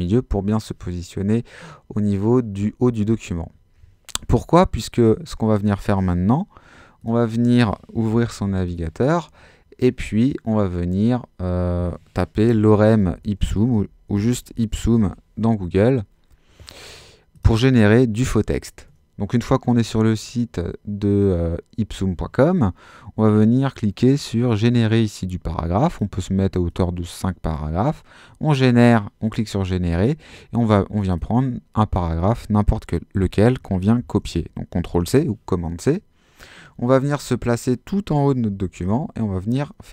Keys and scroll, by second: 7.7-8.9 typing, 12.4-14.9 typing, 14.9 Return, 34.0 super+c, 38.7 super+v.